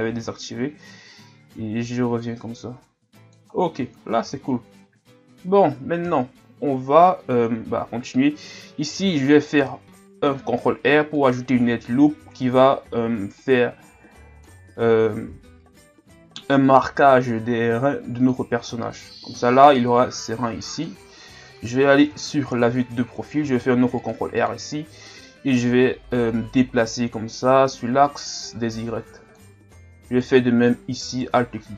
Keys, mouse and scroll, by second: 0.9-3.6 drag, 3.6-3.9 scroll down 2, 4.0-4.7 shift+scroll up 3, 8.9 ctrl+r, 11.7-13.3 ctrl+scroll up 3, 13.4-15.3 drag, 15.3 o, 17.1-18.8 drag, 18.8-20.0 scroll down 4, 20.0 scroll down 1, 20.2-21.7 drag, 21.7 KP_3, 22.4 shift+scroll up 4, 23.4 ctrl+r, 26.9-30.1 drag, 30.1-31.7 alt+right drag.